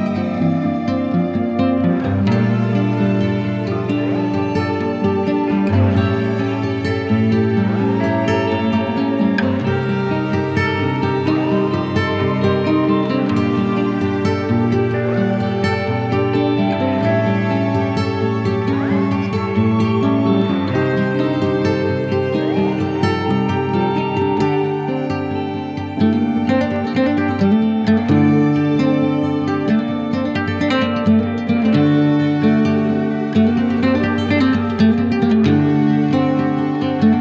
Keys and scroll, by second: 0.9 [, 1.5 ], 2.8 ], 3.1 z, 3.9 ], 5.7 [, 6.6 ], 7.1 ], 8.3 [, 9.2 ], 10.8-13.3 typing, 14.4 [, 15.2 ], 15.6 z, 16.3 [, 17.9 ], 19.3 z, 27.8 shift+Return, 28.3 Return.